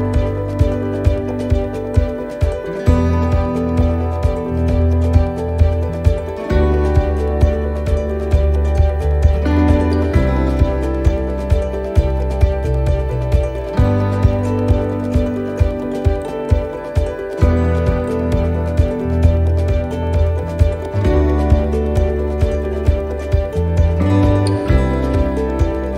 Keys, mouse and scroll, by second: 0.7 alt+shift+right click, 1.4 middle click, 6.9 click, 9.9 s, 17.0 middle click, 19.6-20.7 scroll down 2, 19.9 middle click, 22.6 middle click, 23.9 ctrl+r, 25.7 s.